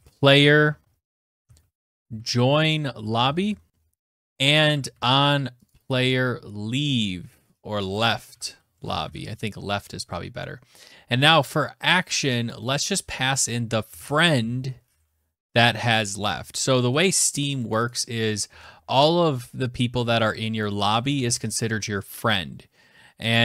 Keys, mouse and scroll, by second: 0.0-3.3 typing, 3.7 click, 3.8 click, 4.3 ctrl+c, 5.0 click, 5.2 click, 5.2 ctrl+v, 6.8 click, 7.5-8.8 typing, 10.2 BackSpace, 11.8 click, 13.0-14.7 typing, 14.9 Tab, 16.3 click, 16.5 click, 17.0 click, 17.2 click, 17.8 ctrl+c, 19.9 click, 20.5 ctrl+v.